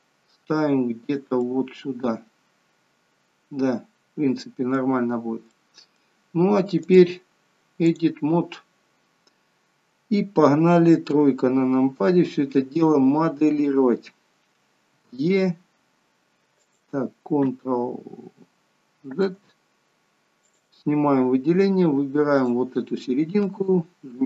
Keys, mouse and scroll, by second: 1.4 middle click, 5.0-5.4 scroll down 2, 5.6 middle click, 6.8 click, 8.7 click, 11.2 KP_3, 12.3 scroll up 2, 13.0 scroll down 1, 15.2 e, 19.2 ctrl+z, 20.6 click, 22.5 click.